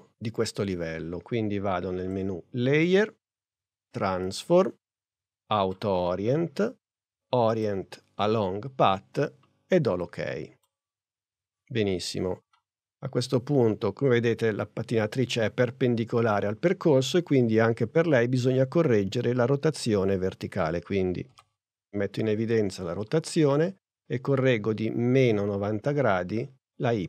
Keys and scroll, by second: 21.3 r.